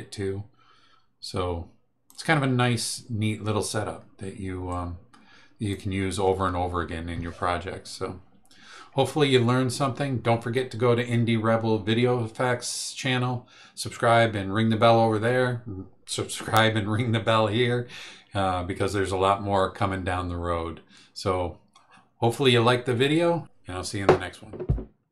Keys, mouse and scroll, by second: 4.7-5.9 drag.